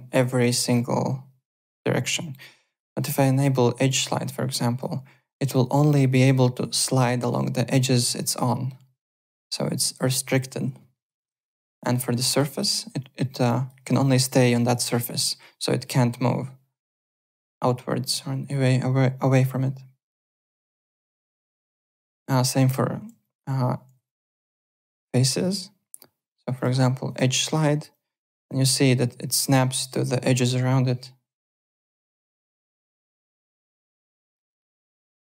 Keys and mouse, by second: 0.2 ctrl+z, 0.7 click, 1.6 ctrl+z, 2.6 click, 3.9 click, 4.3 alt+click, 5.5 click, 11.1 ctrl+z, 11.7 click, 12.3 click, 12.6 alt+click, 13.4 alt+click, 14.5 alt+click, 20.6 ctrl+z, 20.8 alt+click, 21.4 alt+click, 21.5-22.5 typing, 22.1 click, 23.2 alt+click, 24.0 alt+click, 26.3 click, 27.0 click, 27.3 alt+click, 27.9 click, 33.5 alt+click, 33.9 alt+Tab, 34.5 alt+click, 35.2 alt+Tab.